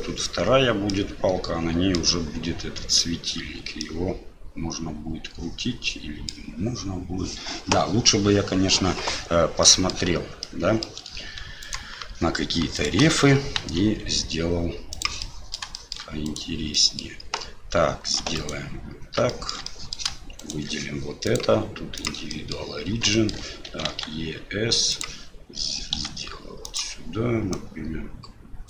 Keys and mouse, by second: 1.0 middle click, 3.8-6.3 middle drag, 9.7 middle click, 10.5-10.9 middle drag, 11.6 alt+click, 12.7 alt+shift+click, 13.6 ctrl+b, 15.2-15.6 drag, 15.8 click, 16.3 click, 16.7 middle drag, 18.3 right click, 19.3 shift+middle drag, 19.6-19.9 middle drag, 20.4 shift+right click, 21.2-22.1 drag, 22.3 middle click, 23.1 shift+middle click, 26.0 s, 27.6-28.6 drag.